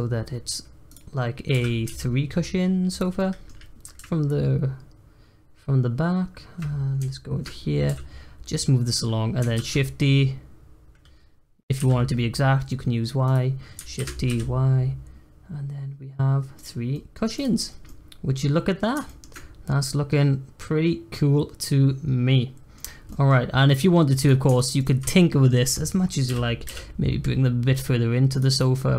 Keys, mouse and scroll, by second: 3.1 middle click, 7.1 shift+middle click, 7.8 g, 9.5 shift+d, 13.9 shift+d, 16.9-17.3 middle drag, 17.3 click, 17.6 scroll down 2, 17.8-22.3 middle drag, 22.8 scroll down 2, 23.1 middle drag, 23.3 scroll up 1, 23.6-24.2 middle drag, 24.2 click, 24.5 shift+click, 24.7 shift+click, 25.1-26.2 middle drag, 26.2 g, 28.5 click, 28.7-28.9 middle drag.